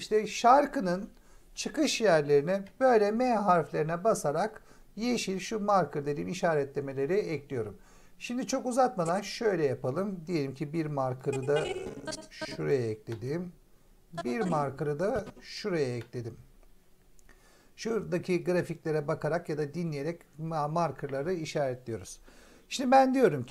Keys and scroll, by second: 2.5 m, 13.0 m, 15.9 m.